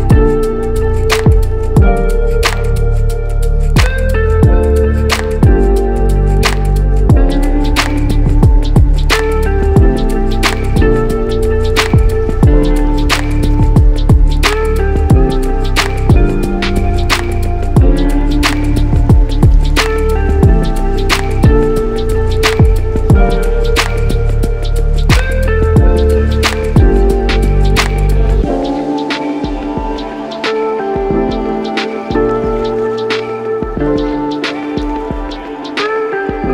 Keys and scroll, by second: 0.0 Down, 0.1 Down, 0.4 Down, 0.8 Down, 1.1 Down, 1.3 Down, 1.5 Down, 3.7 Down, 4.2 Up, 4.4 Up, 4.7 Up, 7.2 Up, 7.8 Up.